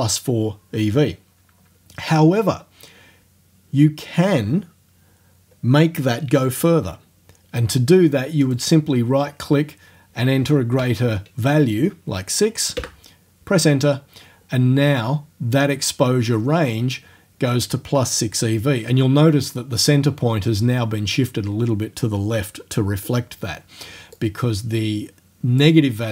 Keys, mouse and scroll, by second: 8.5 right click, 10.8 KP_6, 12.8 KP_Enter, 24.2-25.8 drag.